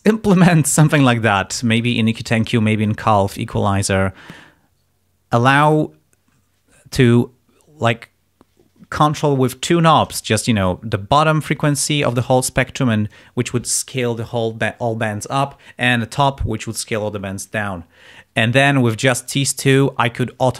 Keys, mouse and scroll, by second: 0.4-1.0 scroll up 2, 1.7 click, 2.8 click, 4.2 click.